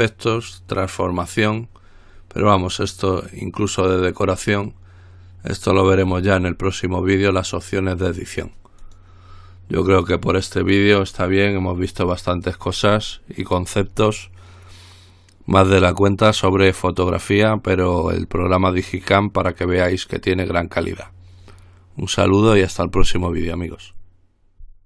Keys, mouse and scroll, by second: 9.0 click.